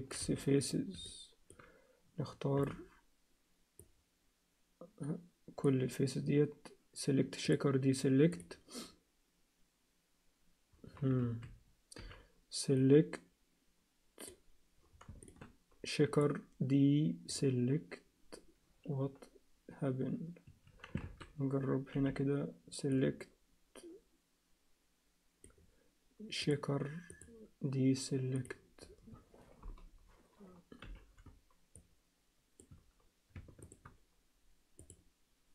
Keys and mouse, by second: 0.2 x, 1.1 alt+middle click, 2.6 b, 7.4-8.6 drag, 11.2 alt+a, 12.0 b, 16.2-20.9 drag, 21.0 alt+a, 21.9 b, 26.5 click, 27.1-29.0 drag, 30.8 b, 34.9 click.